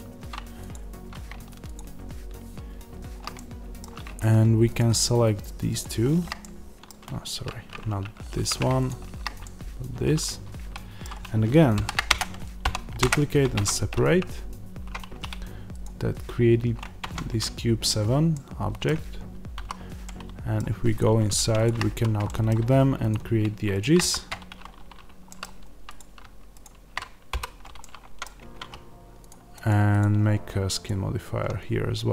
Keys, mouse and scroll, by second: 0.6 click, 3.2-4.6 middle drag, 4.6 shift+click, 6.3-8.7 middle drag, 8.2 ctrl+z, 8.7 shift+click, 9.3-15.7 middle drag, 11.7 shift+d, 12.1 Return, 12.9 p, 13.0 Return, 13.5 Tab, 15.7 click, 16.9 Tab, 18.2-20.9 middle drag, 19.5 a, 20.9 click, 21.8 f, 22.2 middle click, 23.0 click, 23.9 v, 25.2 middle click, 25.9 click, 27.2 f, 27.7-30.7 middle drag, 28.3 Tab, 30.7-32.1 drag.